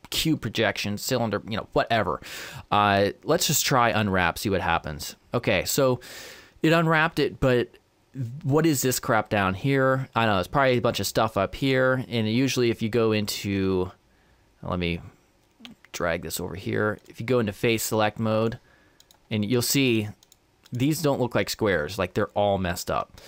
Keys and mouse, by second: 10.7-13.6 right drag, 15.7-19.7 drag, 19.0-22.4 right drag.